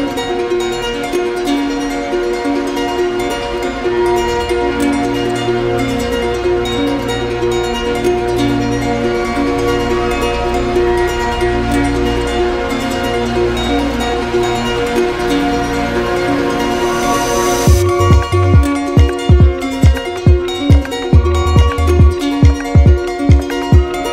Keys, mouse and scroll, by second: 2.8 click, 4.8 click, 6.1-7.1 drag, 7.5-9.6 drag, 12.6 alt+click, 13.5 click, 14.9 alt+click, 16.0 click, 17.0 click, 17.6 alt+click, 18.3 click, 18.6 shift+click, 19.5 shift+click, 19.6 shift+click, 19.8 alt+click, 21.0 shift+click, 21.0 alt+click, 22.6 alt+click, 23.6 ctrl+d.